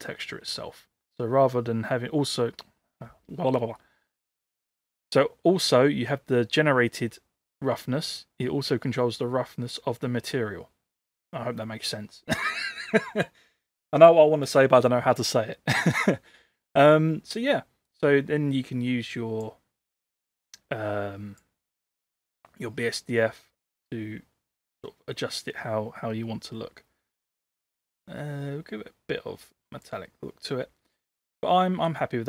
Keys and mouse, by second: 17.9-19.5 drag, 19.9-21.4 drag, 27.4-30.0 drag, 31.0-32.0 middle drag.